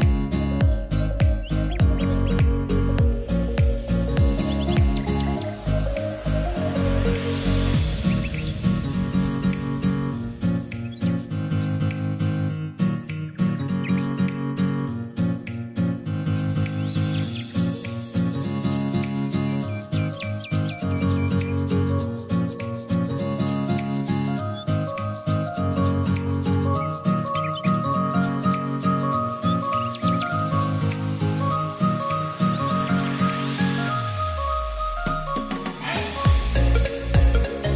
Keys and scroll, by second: 0.0-0.9 typing, 21.1 t, 25.5 e, 29.5-30.7 typing.